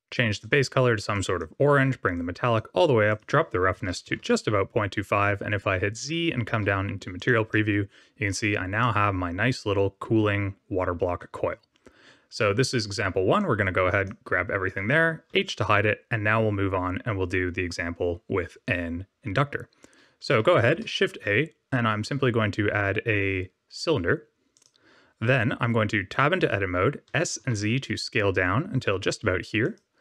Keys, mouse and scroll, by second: 0.4 click, 2.1 click, 3.0 click, 6.0 z, 7.1 click, 7.4 middle click, 8.7 middle click, 13.3 click, 15.2 h, 20.6 shift+a, 26.0 Tab, 27.0 s.